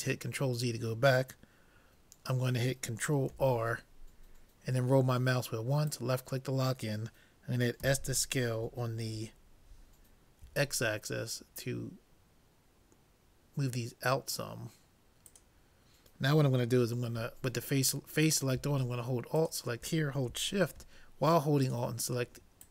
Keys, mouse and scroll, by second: 3.3 ctrl+r, 18.2-21.1 drag, 21.7-22.7 drag.